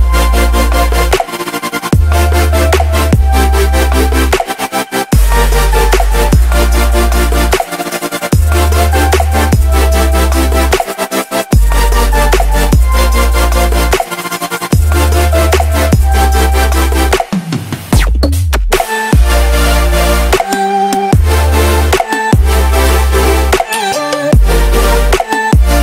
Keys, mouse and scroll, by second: 0.7-3.4 typing, 3.9 click, 4.0 F10, 4.4 click, 7.1-8.4 typing, 8.7-14.3 drag, 16.3 KP_3, 17.0 click, 17.3 KP_0, 17.5 Return, 17.9 click, 18.0 F10, 18.4 click, 21.4 KP_1, 21.8 click, 22.2 KP_1, 22.6 Return, 23.0-25.8 drag, 25.5-25.8 typing.